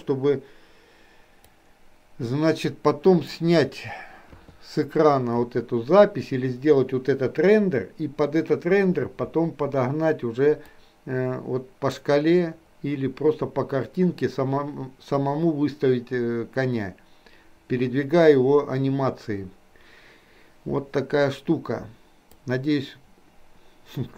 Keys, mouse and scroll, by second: 10.7-24.1 drag.